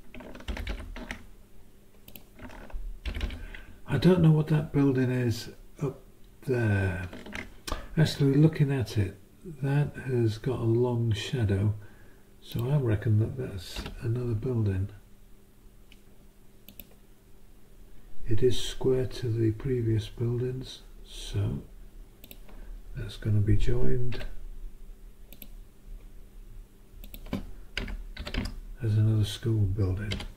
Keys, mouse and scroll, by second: 0.5 ctrl+Up, 2.1 click, 3.0 ctrl+Up, 12.5 click, 13.8 b, 16.7 click, 22.2 click, 24.1 s, 25.3 click, 27.0 click, 27.8 Return, 30.1 -.